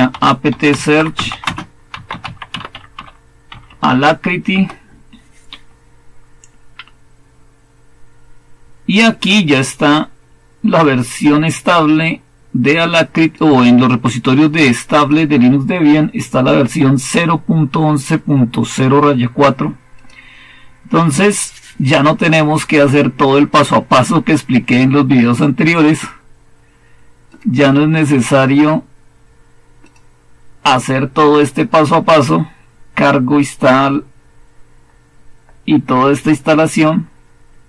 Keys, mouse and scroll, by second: 0.0-4.2 typing, 4.4 Return, 19.8-26.0 drag, 27.2-34.2 drag, 34.2-37.6 scroll down 1.